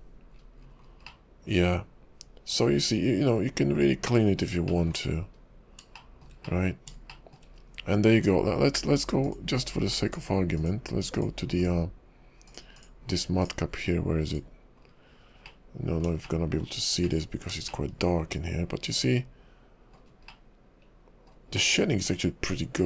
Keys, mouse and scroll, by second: 0.3-0.9 scroll down 11, 1.1 middle click, 4.7 shift+middle click, 5.0-5.8 scroll up 6, 6.0 shift+middle click, 6.5 middle click, 7.1 shift+middle click, 7.5-9.0 scroll up 1, 9.5 click, 10.2 click, 10.6 click, 11.1 click, 14.8 scroll down 2, 15.4 middle click, 16.1 scroll down 1, 16.2 shift+middle click, 16.7-17.3 scroll up 3, 17.1 middle click, 17.7 shift+middle click, 20.3 shift+middle click, 21.5 shift+middle click.